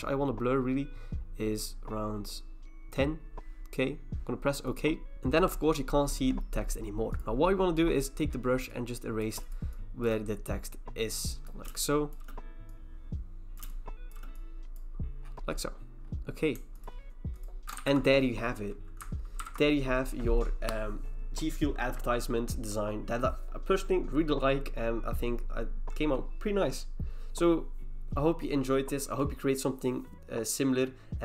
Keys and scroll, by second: 17.8 ctrl+e, 19.4 ctrl+h.